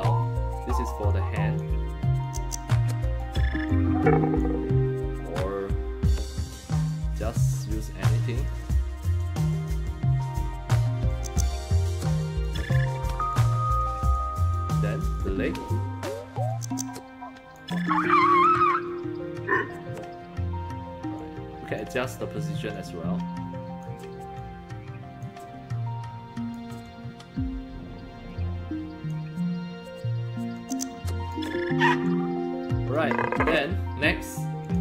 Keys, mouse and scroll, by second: 0.0 scroll up 2, 1.1 click, 2.2 click, 3.7 click, 11.1-12.4 drag, 13.3 click, 15.0 click, 16.5-17.5 drag, 17.8 click, 19.1 middle click, 21.2 click, 22.7-23.8 drag, 24.4 click, 25.7 click, 26.8-29.1 drag, 30.6 click, 32.1 click, 34.6 click.